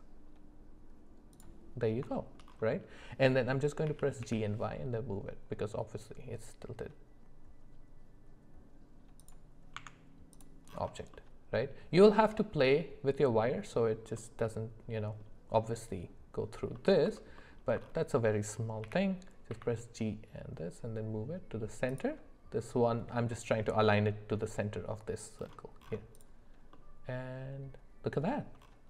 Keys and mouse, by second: 2.1 shift+middle click, 3.8 g, 9.8 Tab, 11.1 middle click, 12.4-12.7 middle drag, 14.2-15.2 middle drag, 15.6 middle click, 16.7 middle click, 17.4 alt+middle click, 18.8 g, 26.7-28.3 middle drag.